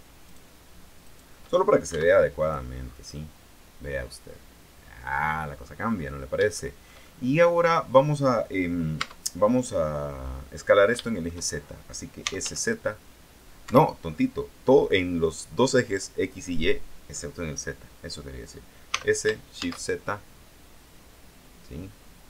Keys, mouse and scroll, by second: 0.4 shift+right click, 1.2 shift+right click, 2.1 x, 2.6 click, 3.0-3.3 scroll down 2, 3.3-6.0 middle drag, 6.0-6.4 scroll down 2, 6.7-8.1 shift+middle drag, 9.1 Tab, 11.1 shift+middle click, 12.1-13.1 typing, 13.9 Escape, 19.1 s, 19.7 shift+z.